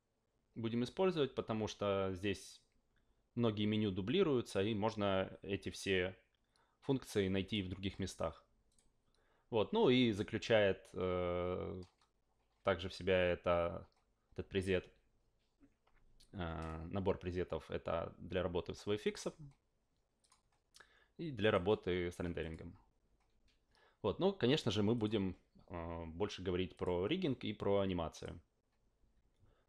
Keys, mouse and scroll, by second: 7.4 click, 8.7 click, 19.0 click, 20.2 click, 21.4 click, 22.4 click, 24.9 click, 26.7 click, 28.1 click.